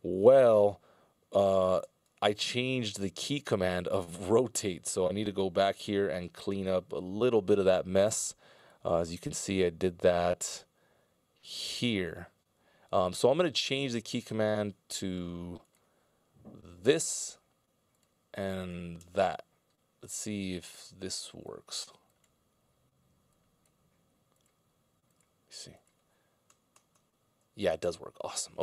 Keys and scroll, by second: 2.3 alt+k, 4.7 r, 7.3 e, 19.0 ctrl+alt+super+Left, 27.0 ctrl+alt+super+Right, 27.5 ctrl+alt+super+Left.